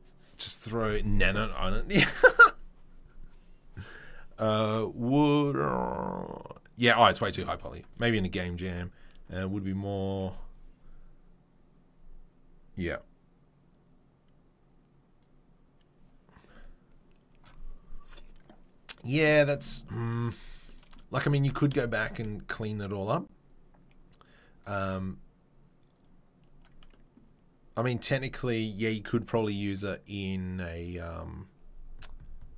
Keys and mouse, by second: 21.2 click, 21.5 Tab, 22.1 a, 24.1 click, 26.0-32.5 drag.